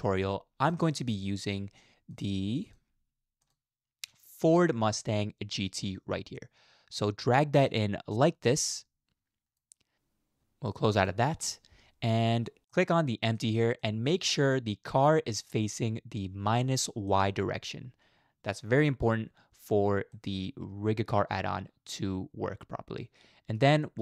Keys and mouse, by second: 12.2-12.6 middle drag, 12.7 middle click, 13.4-13.8 drag, 13.8-15.0 middle drag, 15.4 middle click, 17.1 shift+middle click, 20.1-23.6 middle drag, 23.8 middle click.